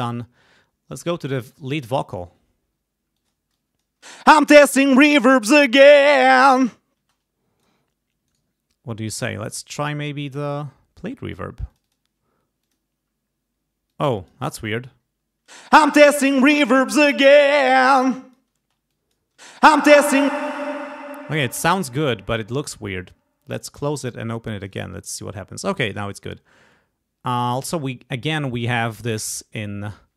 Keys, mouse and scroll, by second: 0.9 click, 1.7 click, 3.1 click, 3.5 click, 4.0 space, 6.9 space, 7.6 click, 8.2-9.7 right drag, 9.8 click, 11.7 click, 12.6 click, 13.9 click, 15.4 space, 17.6 click, 18.1 click, 18.5 space, 18.9 click, 19.3 space, 20.3 space, 20.4 click, 23.7 click, 24.6 click.